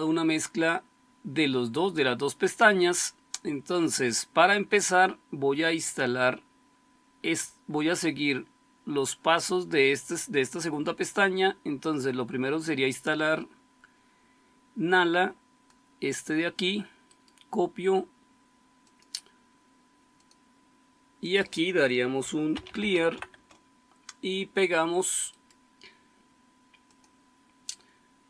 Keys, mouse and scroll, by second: 2.7-12.5 scroll down 1, 12.5-15.6 scroll down 1, 15.6-17.1 scroll down 1, 17.1-18.8 scroll down 1, 18.8 scroll down 1, 19.1-22.4 drag, 22.2-23.5 typing.